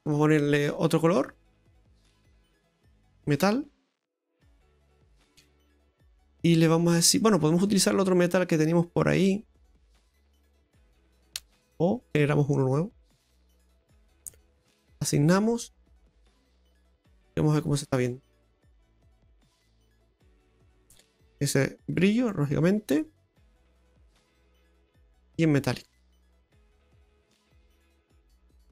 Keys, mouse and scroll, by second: 0.0 click, 1.1 click, 2.8 click, 3.0 click, 7.0 click, 12.8 click, 15.0 click, 18.5 click, 19.0 click, 19.0-19.4 scroll up 1, 19.4 middle click, 21.6 click, 22.6 scroll down 2, 22.9 middle click, 25.2 click, 26.3-26.6 scroll up 2, 26.6 right click, 27.4 middle click.